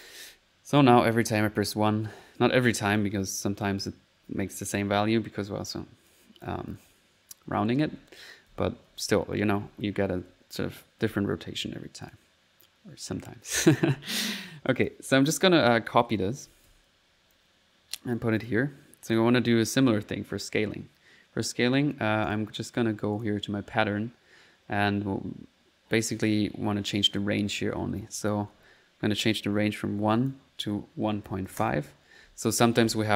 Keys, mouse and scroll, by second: 0.0-1.9 typing, 3.0 click, 6.1 click, 7.6-11.2 typing, 12.1 click, 13.1 middle click, 13.5 click, 14.7 click, 15.3 right click, 15.3-17.0 typing, 17.3 ctrl+click, 18.4 click, 19.8 middle click, 22.3 click, 22.7-23.4 typing, 28.0 click, 30.1 click, 32.4 click.